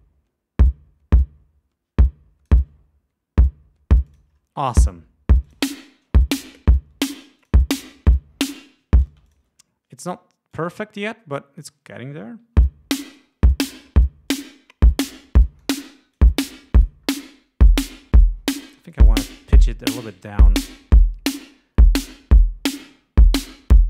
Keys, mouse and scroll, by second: 0.1 click, 4.3 click, 5.7 click, 7.6 click, 8.8 ctrl+scroll up 2, 9.4 ctrl+space, 9.5 ctrl+click, 10.8 click, 12.8 l, 13.3 click, 14.5 click, 15.8 click, 19.1 click, 23.6-23.8 drag.